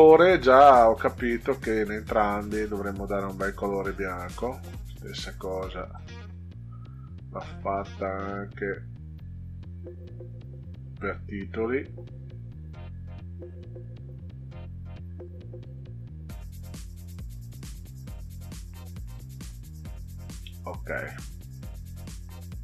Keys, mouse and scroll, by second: 1.2 click, 2.6 scroll down 2, 3.8 click, 5.9 drag, 10.9 click, 13.4 click, 14.4 scroll down 2, 15.6 click, 18.8 click, 22.4-22.6 drag.